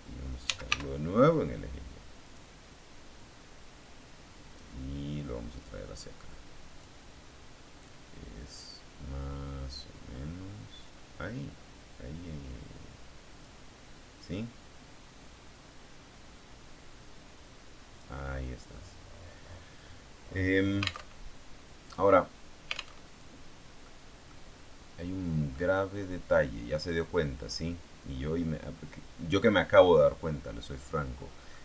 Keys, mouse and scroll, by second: 0.4 s, 0.8 y, 2.2 click, 3.1-4.7 drag, 5.5-6.9 drag, 7.8-13.5 drag, 14.1-18.1 drag, 18.6-20.7 middle drag, 21.0 alt+Tab, 23.0 alt+Tab, 23.7 middle click, 24.4-25.2 scroll down 1, 25.4 middle click, 25.8-31.6 drag.